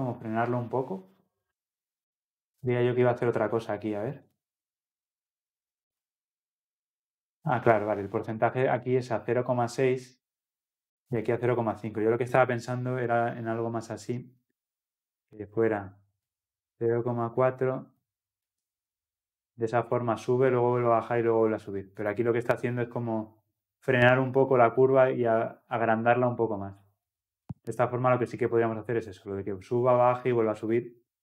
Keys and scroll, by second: 22.2 ctrl+F10.